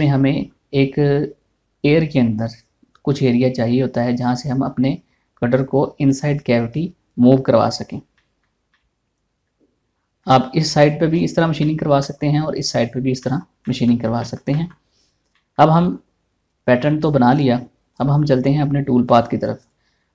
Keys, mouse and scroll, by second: 8.6 scroll up 2, 8.8-11.7 shift+middle drag, 11.7 scroll down 1, 12.2 shift+middle click, 15.5 scroll up 1, 15.9 shift+middle click, 16.4 scroll down 1.